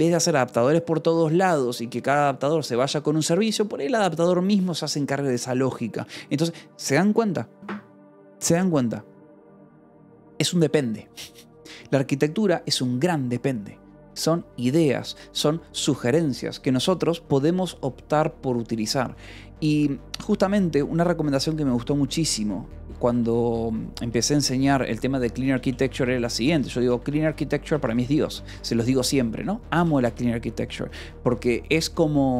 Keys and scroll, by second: 23.0 a, 24.0 Return, 25.7-29.9 typing.